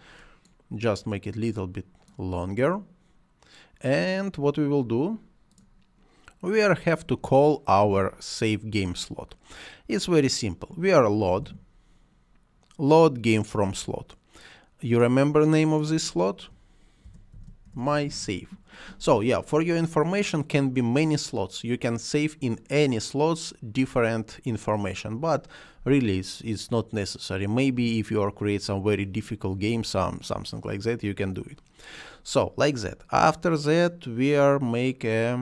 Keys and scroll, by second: 10.8-11.6 typing, 16.5-18.4 typing.